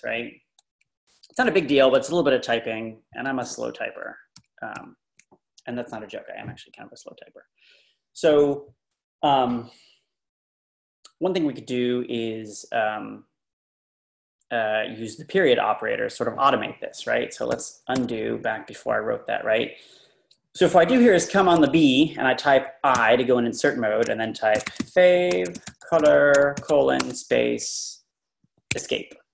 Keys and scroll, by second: 0.1 Up, 0.9 Right, 3.3-4.3 Right, 4.7 Right, 18.0 u, 19.3 typing, 21.3 Left, 21.5 Right, 23.0 i, 24.3-27.1 typing, 28.7 Escape.